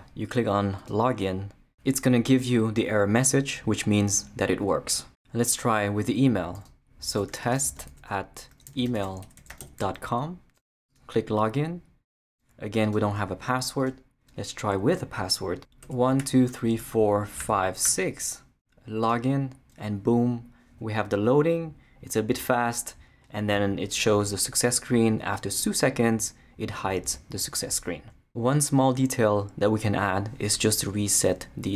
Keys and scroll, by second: 7.3-10.1 typing, 15.6-17.8 typing.